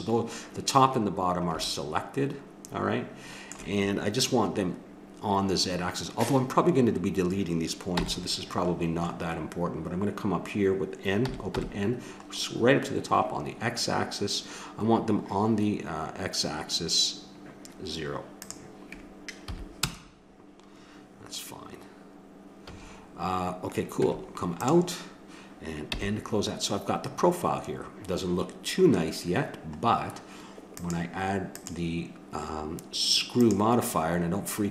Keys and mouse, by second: 1.2-2.8 middle drag, 7.9 n, 11.5 n, 18.4-20.2 drag, 22.6 a, 24.0 Tab, 25.9 n, 30.7-33.4 drag.